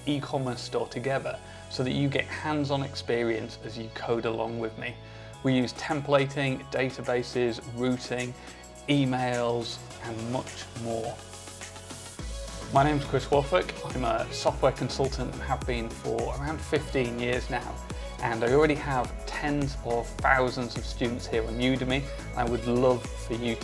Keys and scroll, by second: 0.0-1.0 typing, 2.2 super+s, 4.4 super+w.